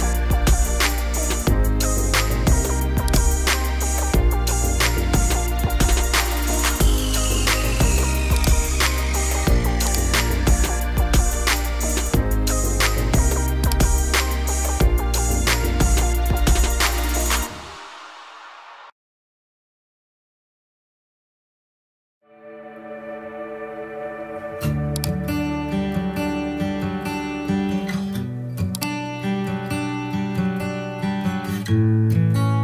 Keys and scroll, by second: 3.3-4.3 typing, 10.9 -, 15.2 BackSpace, 17.7-18.7 typing, 30.5 0.